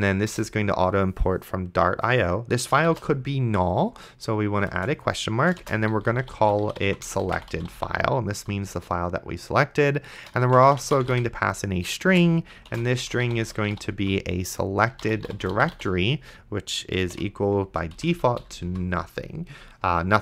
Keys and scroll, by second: 0.3 Return, 3.2 shift+/, 4.7-8.4 typing, 8.8 Return, 10.4-18.7 typing.